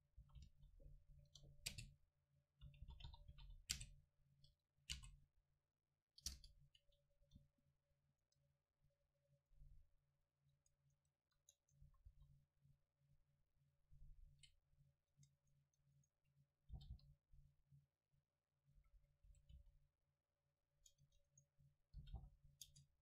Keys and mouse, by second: 0.2 click, 0.2 s, 1.0 click, 2.7 r, 5.0 space, 7.2 Tab, 7.7 middle click, 8.3 Tab, 10.5 Tab, 11.0 Tab, 11.4 Tab, 11.9 s, 14.0-15.3 drag, 15.1 Tab, 16.8 g, 18.8-20.6 drag, 18.8 a, 19.0 a, 19.3 s, 20.8 Tab, 20.8-22.2 drag, 21.1 Tab, 21.3 right click, 22.0 g, 22.7 Tab.